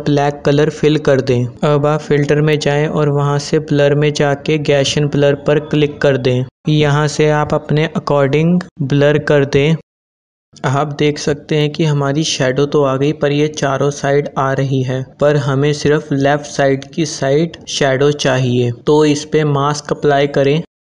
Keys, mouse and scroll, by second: 1.5 alt+BackSpace, 1.8 ctrl+d, 3.5 click, 6.4-12.7 drag, 13.1-18.5 drag, 20.5 click.